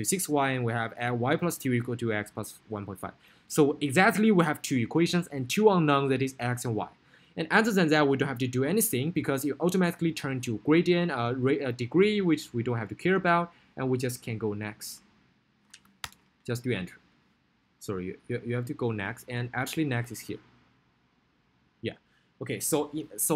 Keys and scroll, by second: 8.6 Down, 12.3 Right, 13.2 Down, 15.2 Right, 17.2 Return, 18.6 Down.